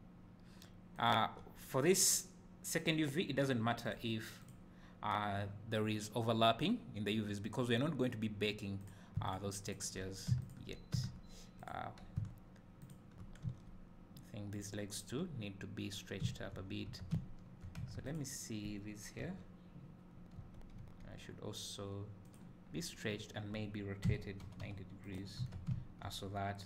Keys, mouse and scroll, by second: 1.2 click, 8.9 click, 9.3 shift+click, 12.9 shift+click, 13.5 s, 14.6 click, 17.0 Tab, 17.2 `, 17.9 Tab, 18.1 click, 19.2 l, 20.4 a, 20.8 s, 22.4 click, 22.7 scroll up 2, 24.2 r, 25.2 click, 25.4 Tab, 25.7 `, 26.4 scroll down 2.